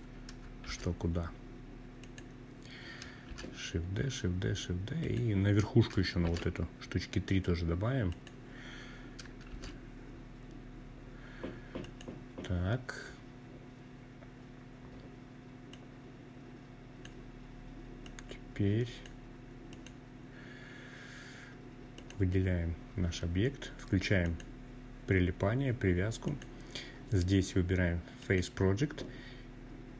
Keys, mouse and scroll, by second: 0.7 click, 2.0 shift+d, 3.7 click, 4.9 shift+d, 6.8 click, 8.2 shift+d, 10.5 click, 14.4-15.8 drag, 16.7-17.8 drag, 18.4 click, 20.6 click, 22.9 click, 25.0-29.9 drag.